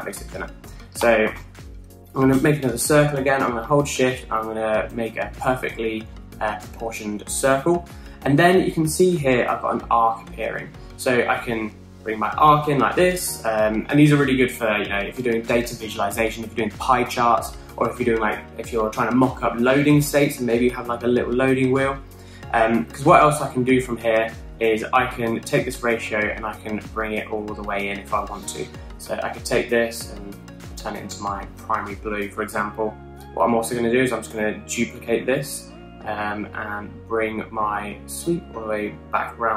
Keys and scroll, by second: 0.0-0.4 typing, 1.4 super+z, 1.7 super+z, 2.1 super+z, 3.0-3.3 typing, 35.0 super+d.